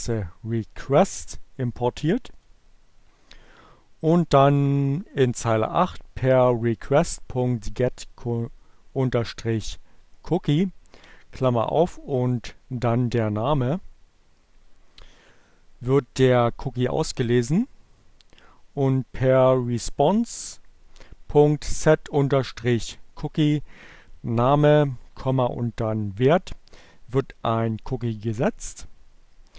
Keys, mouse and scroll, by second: 1.0 click.